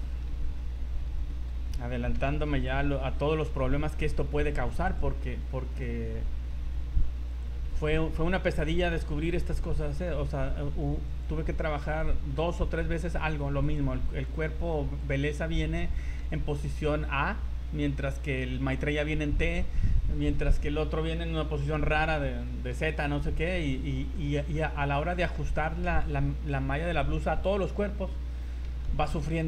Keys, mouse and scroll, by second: 0.4 g, 2.1 o, 2.5 Escape, 3.0 g, 5.7 right click, 6.4 g, 7.8 right click, 8.0 g, 9.2 right click, 9.8 right click, 10.1 g, 11.9 right click, 12.4 g, 14.3 right click, 14.4 g, 15.3-15.8 scroll down 8, 16.0 shift+middle click, 22.1 scroll up 3, 22.4 shift+middle click, 22.8 scroll up 3, 23.0 z, 23.6 right click, 24.1 shift+middle click, 24.6 middle click, 24.8-25.4 scroll down 4, 25.1 shift+middle click, 28.5 scroll up 4, 28.9 z, 29.4 shift+middle click.